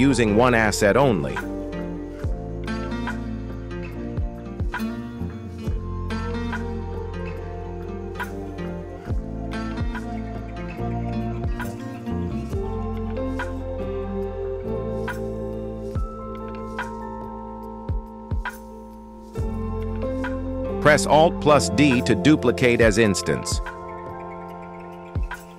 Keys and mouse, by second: 0.4 r, 3.2 ctrl+z, 4.5 r, 7.6 g, 9.6 KP_1, 10.9 shift+middle click, 11.9 r, 17.1 z, 17.2 z, 19.9 r, 21.7 alt+d, 23.7 KP_7, 24.3 r.